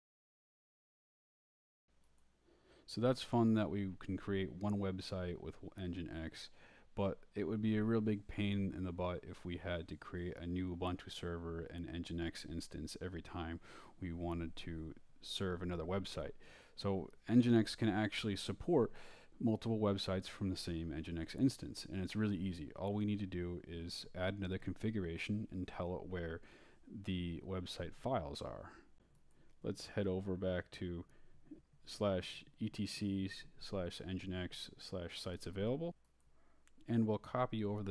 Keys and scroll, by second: 0.0-1.8 typing, 0.5 shift+Escape, 17.6-18.4 typing, 18.8 Return, 22.9-25.9 typing, 27.6-28.9 typing, 30.5 n, 30.9 g, 31.2 Tab, 32.8 Return, 32.8-37.9 typing, 35.9 Tab, 36.3 Return.